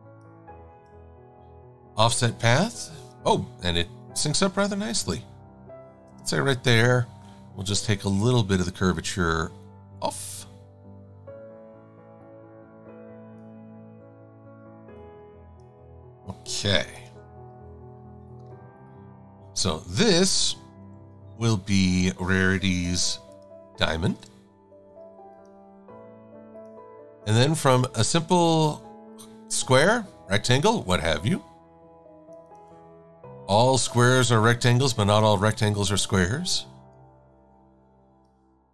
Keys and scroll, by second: 2.2 super+9, 5.7 Up, 16.9 super+-, 17.0 super+-, 17.5 v, 20.9 super+-, 22.8 i, 28.5 a, 33.9 a.